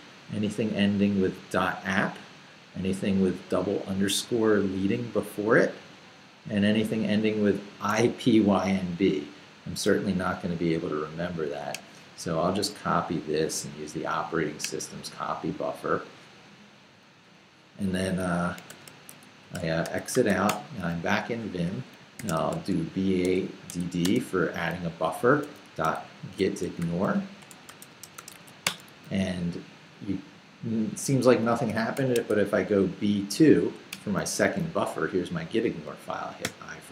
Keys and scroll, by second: 18.7-20.8 typing, 21.9-24.0 typing, 25.2-28.8 typing, 31.9 shift+;, 32.3 shift+b, 33.2 b, 33.6 2, 33.9 Return.